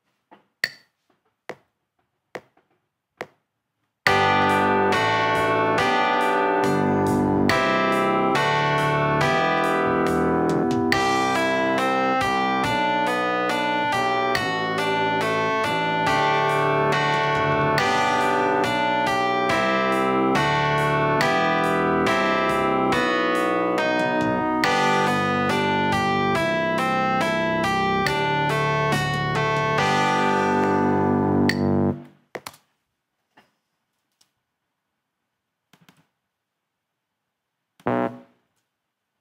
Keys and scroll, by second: 32.5 space, 38.5 super+a.